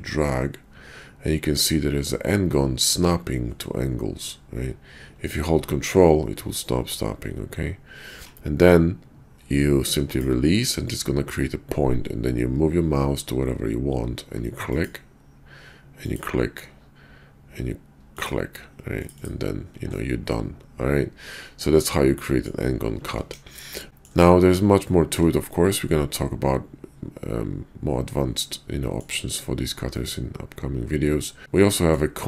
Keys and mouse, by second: 20.0-22.5 middle drag, 22.8 ctrl+z, 23.2 KP_5, 23.9 middle click, 24.9 shift+middle drag, 25.7-29.0 middle drag, 29.8-32.2 middle drag.